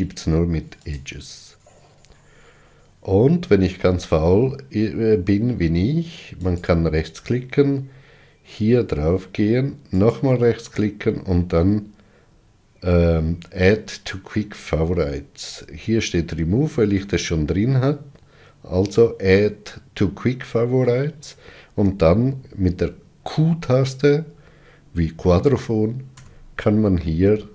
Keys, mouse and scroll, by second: 0.8-3.8 right drag, 6.3-9.3 right drag, 26.1 q.